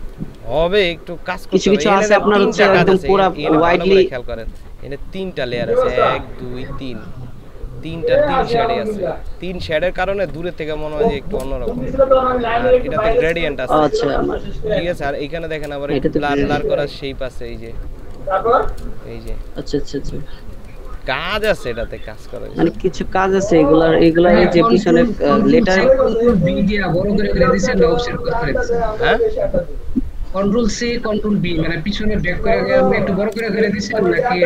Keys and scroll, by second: 1.4 ctrl+space, 3.6 ctrl+space, 9.4 ctrl+space, 10.3 ctrl+space, 12.6 ctrl+space, 17.4 ctrl+space, 18.1 ctrl+space, 19.4 ctrl+space, 33.5 space.